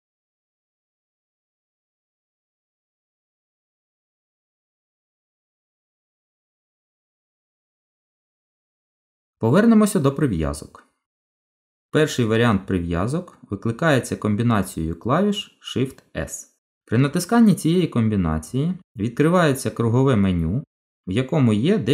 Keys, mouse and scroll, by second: 4.3 middle click, 15.9 shift+s.